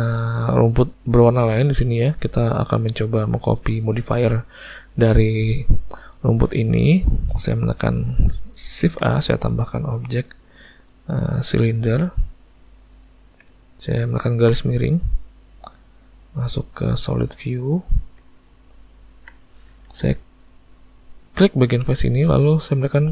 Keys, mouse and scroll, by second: 8.8 shift+a, 14.6 /, 15.6 z, 18.7 ctrl+middle click, 19.3 click, 19.9 Tab, 21.4 click.